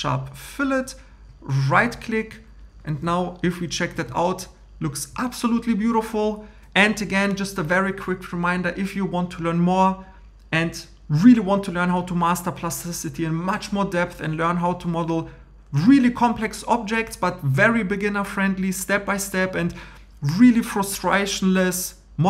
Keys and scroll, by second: 2.9 shift+e.